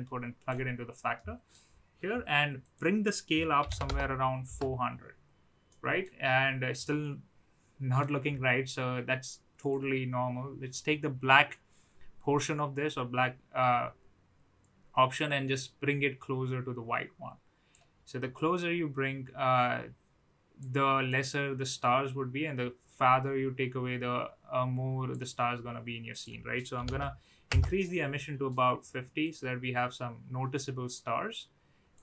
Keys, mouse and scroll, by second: 1.1-1.7 middle drag, 2.6-4.9 drag, 3.8 KP_0, 5.6 middle click, 6.9-8.0 middle drag, 9.7-17.6 drag, 18.3-20.5 drag, 21.0-25.1 drag, 26.2-27.9 drag, 29.3-32.0 drag.